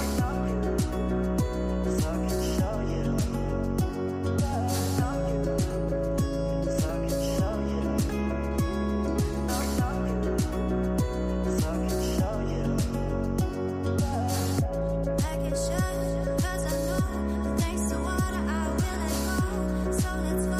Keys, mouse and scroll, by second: 1.5-2.1 middle drag, 2.1 click, 3.3-5.6 scroll up 57, 6.3 click, 8.2 click, 8.9 scroll up 4, 9.6-11.0 middle drag, 11.0 click, 13.3 click, 14.0 scroll up 3, 15.4 KP_0, 16.0-16.5 scroll up 9, 17.0 scroll down 3, 19.7-20.5 drag.